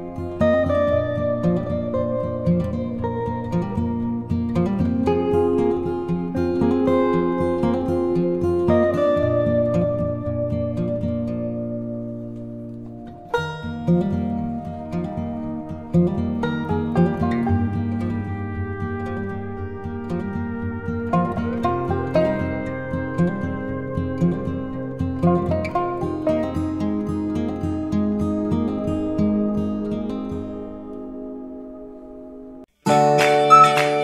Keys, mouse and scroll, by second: 4.5-6.8 drag, 6.8 z, 7.7 alt+click, 10.9 t, 13.9 t, 15.7 click, 20.8-21.2 typing, 22.3 shift+5, 24.8 click, 25.9 ctrl+t, 27.6-31.4 alt+drag, 31.4-34.0 alt+drag.